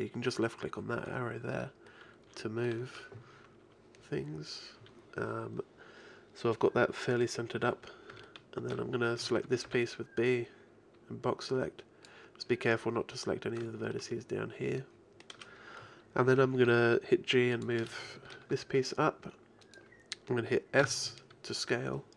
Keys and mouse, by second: 8.9 middle click, 9.2 a, 9.7 b, 16.7 g, 18.6 g, 20.8-22.0 drag, 20.8 s.